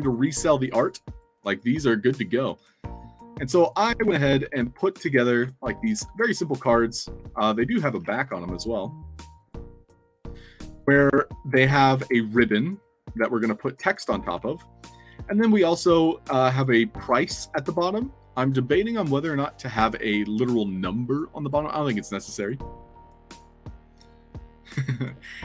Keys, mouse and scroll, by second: 1.0 click, 1.5 click, 2.7-3.6 alt+drag, 3.8-6.4 typing, 6.8 alt+click, 8.7 alt+click, 11.0-12.0 alt+drag, 13.8-14.8 typing, 16.5 click, 19.7 alt+Tab, 21.7 click, 23.3 click.